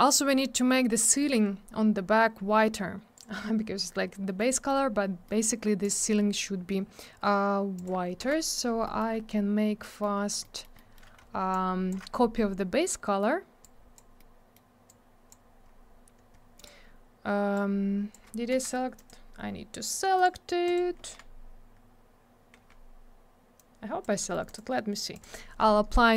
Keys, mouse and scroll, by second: 3.2 click, 3.2 click, 4.1 middle click, 4.5 middle click, 4.7 middle click, 5.0 scroll down 1, 5.2 middle click, 5.4 middle click, 5.8 click, 5.9 click, 7.7 click, 7.8 click, 8.2 m, 8.8 middle click, 9.0 scroll up 1, 9.1 scroll down 1, 10.2 scroll up 1, 10.4 middle click, 10.8 middle click, 11.0 middle click, 11.5 shift+click, 12.9 middle click, 14.2 middle click, 15.6-16.5 scroll up 1, 16.6 click, 16.6 click, 17.5 click, 18.5 F4, 19.0 click, 19.1 click, 20.2 click, 20.2 click, 20.7 click, 20.7 click, 21.0 F4, 23.6 click, 24.2 middle click, 24.3 middle click, 25.2 click.